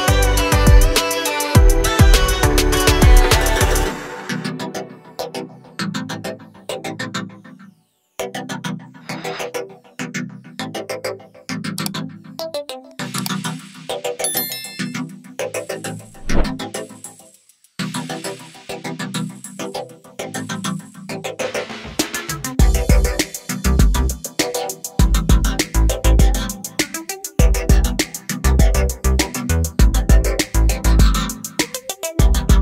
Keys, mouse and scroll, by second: 1.3 scroll down 1, 4.4 scroll up 1, 6.5 click, 7.8 click, 10.4 click, 11.6 Page_Up, 15.3 click, 17.6 click, 20.4 click, 24.0 scroll down 1, 26.9 scroll down 1, 28.2 scroll down 1, 28.9 scroll up 1, 29.1 scroll down 1, 29.9 scroll up 1, 31.6 click.